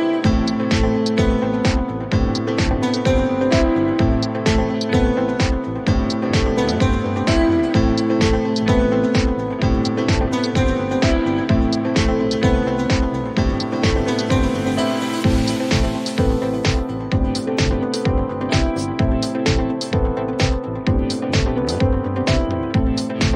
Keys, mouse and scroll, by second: 0.8 click, 4.7 click, 6.6 click, 8.1 click, 12.6 click, 14.3 click, 16.6 click, 18.7 click.